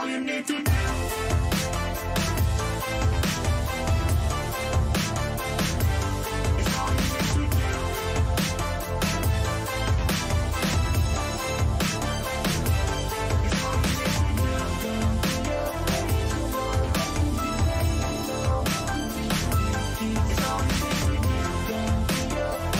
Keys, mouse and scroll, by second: 1.1 a, 1.5 a, 1.8 a, 22.3-22.7 middle drag.